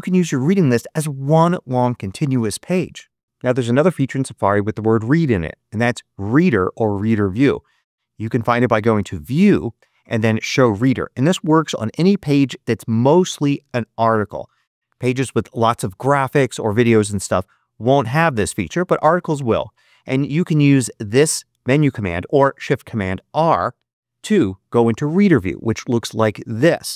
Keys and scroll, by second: 24.9 shift+super+r.